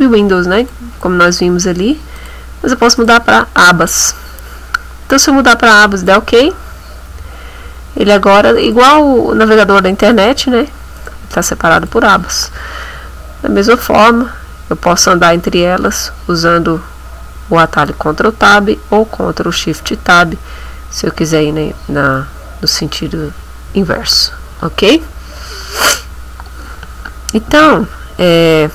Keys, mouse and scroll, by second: 2.2 click, 3.0 click, 6.0 click, 8.6 click, 10.0 click, 11.0 click, 11.8 click, 13.6 ctrl+Tab, 15.5 ctrl+Tab, 17.8 ctrl+Tab, 19.8 ctrl+shift+Tab, 21.8 ctrl+shift+Tab.